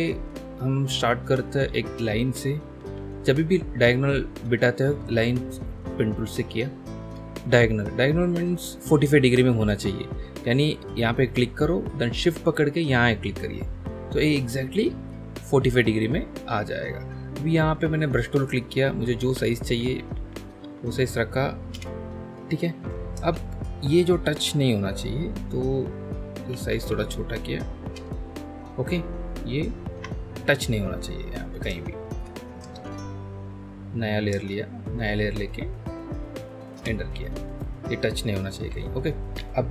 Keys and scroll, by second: 2.8 p, 17.7 b, 18.9-21.1 typing, 21.7 Return, 23.2 ctrl+z, 26.5 typing, 27.9 Return, 29.9 BackSpace, 31.7 ctrl+z, 32.6 ctrl+z, 34.6 ctrl+z, 36.7 Return, 38.6 BackSpace.